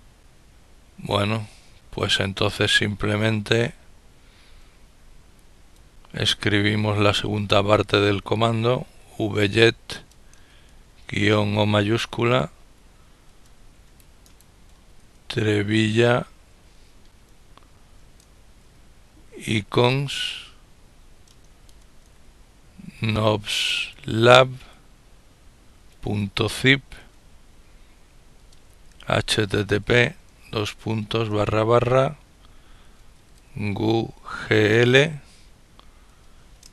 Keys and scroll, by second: 7.0 typing, 10.2 typing, 12.2 typing, 13.3-14.5 typing, 16.0-24.2 typing, 25.5-26.8 typing, 28.2-30.5 typing, 32.9-34.3 typing, 35.7-36.7 typing.